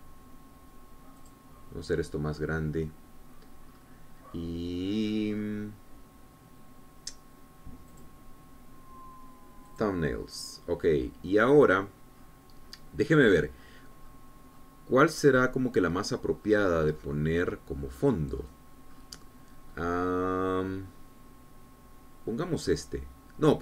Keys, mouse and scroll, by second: 2.3 click, 4.8-5.3 scroll down 2, 9.0 click, 10.8 click, 12.5-16.4 scroll down 14, 17.0-17.3 scroll down 1, 17.6-21.3 scroll up 11, 21.7-22.2 scroll up 4.